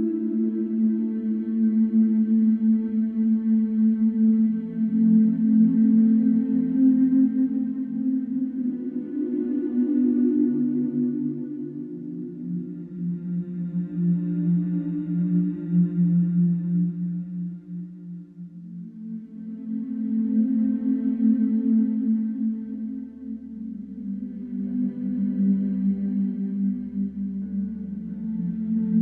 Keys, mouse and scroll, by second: 0.3 Escape, 1.7 click, 3.0 click, 4.7-5.7 scroll, 7.2 click, 9.2 click, 11.7 shift+click, 12.4 shift+click, 13.7 typing, 14.4-15.5 Return, 15.8 Escape, 18.4 click, 21.2-22.1 scroll, 22.2-22.9 scroll, 22.9-23.4 scroll, 25.2 click, 28.1 click.